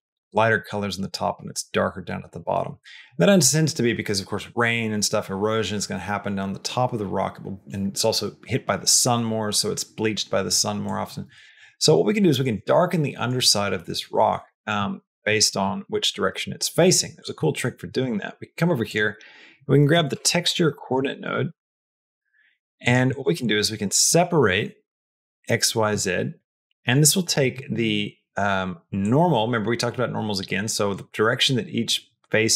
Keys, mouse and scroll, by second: 12.1 middle click, 12.7 middle click, 13.3 middle click, 14.0 middle click, 14.3 middle click, 14.7 middle click, 15.1 middle click, 15.5 middle click, 17.0 click, 17.3 middle click, 17.9 shift+a, 23.0 click, 23.2 shift+a, 24.8 Down, 26.5 click, 28.9-30.8 drag.